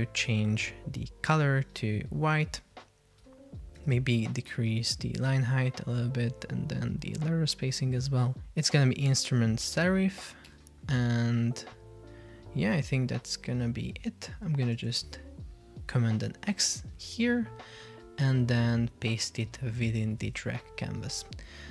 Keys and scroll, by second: 4.0 super+a, 14.9 super+x, 20.3 super+v.